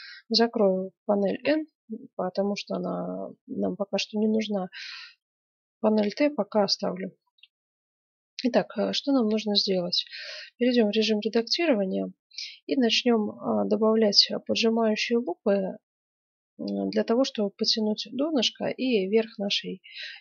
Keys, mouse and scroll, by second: 1.4 n, 2.3-2.8 scroll up 1, 2.8 middle click, 6.6-8.2 middle drag, 10.2 Tab, 20.0-20.2 middle drag.